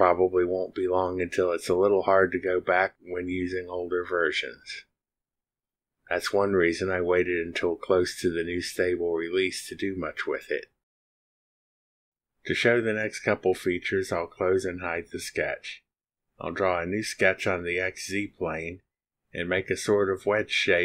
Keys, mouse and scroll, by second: 16.2 click, 17.0 click, 17.9 click, 18.7 click.